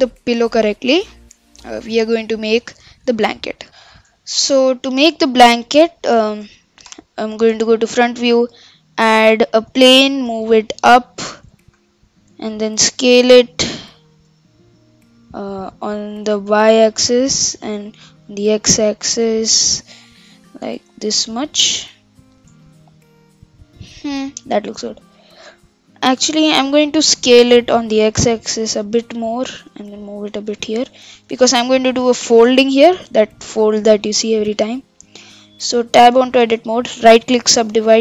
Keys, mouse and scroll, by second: 1.1-1.5 scroll up 3, 1.5-1.9 scroll down 4, 1.9-4.9 middle drag, 4.9-5.7 scroll up 3, 5.7-6.1 middle drag, 6.1-6.9 scroll down 1, 6.9 KP_1, 7.8-8.3 shift+middle drag, 8.3 shift+a, 10.0 g, 11.7 KP_7, 12.5-12.9 scroll down 2, 12.9 s, 14.3 s, 15.8 s, 17.6 s, 20.6 g, 22.6-25.0 middle drag, 25.0-27.1 scroll up 3, 27.1 KP_7, 27.9 s, 29.6 g, 32.4 KP_1, 34.3 scroll up 2, 34.5-35.3 middle drag, 35.3 Tab, 36.1 Tab, 36.4 Tab, 36.9-38.0 right drag.